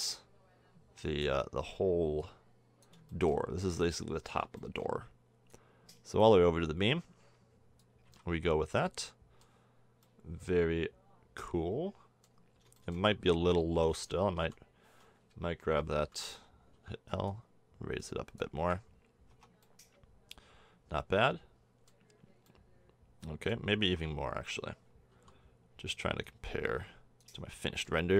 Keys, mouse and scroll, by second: 3.2-3.7 middle drag, 4.7-7.4 middle drag, 8.1 a, 8.3 Tab, 13.3 Tab, 14.4 l, 15.3 a, 16.7 l, 18.6 s, 19.3 Tab, 23.8 Tab, 25.1 l, 27.6 drag.